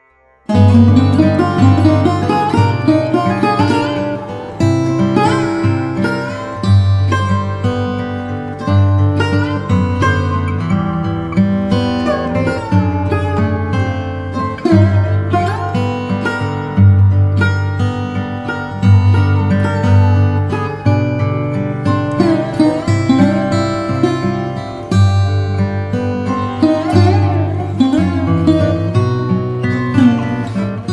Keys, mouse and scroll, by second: 3.3 click, 18.2 click, 21.0 click, 22.9 ctrl+a, 24.1 click, 26.3 click, 30.1 click.